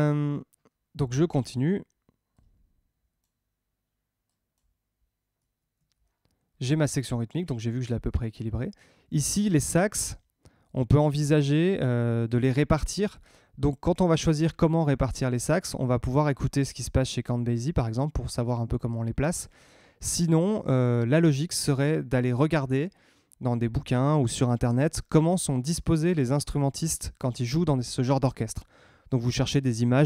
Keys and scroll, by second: 5.3 Tab.